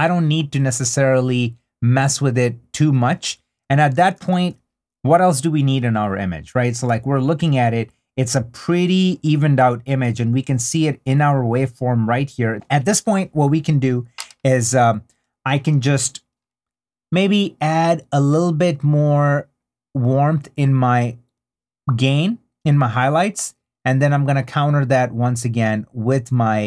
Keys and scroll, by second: 3.9 super+d.